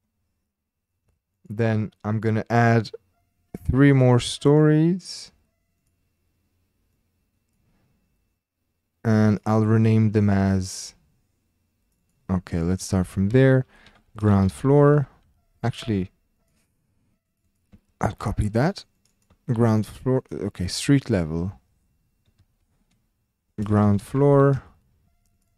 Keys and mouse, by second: 1.3-2.7 drag, 3.9-5.9 drag, 6.9 click, 9.4-11.8 drag, 12.1-16.8 drag, 15.0 o, 17.2-18.6 drag, 18.9 click, 19.2 ctrl+click, 20.9-24.5 drag, 24.3 o, 25.3-25.5 drag.